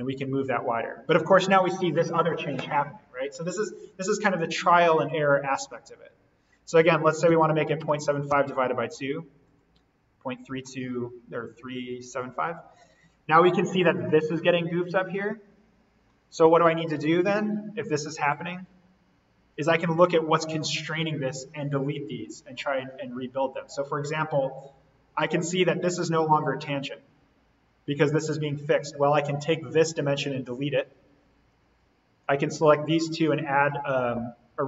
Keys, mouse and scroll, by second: 7.2-8.9 typing, 9.5 click, 11.4-12.3 scroll down 1, 12.3-12.8 scroll up 1, 12.8-13.3 scroll down 1, 15.7 scroll up 1, 16.8-17.6 scroll up 1, 18.2-22.0 drag, 23.5 scroll down 1, 26.8-28.9 scroll up 2, 29.9 Delete, 31.6 Escape, 32.1 click, 33.0 ctrl+click.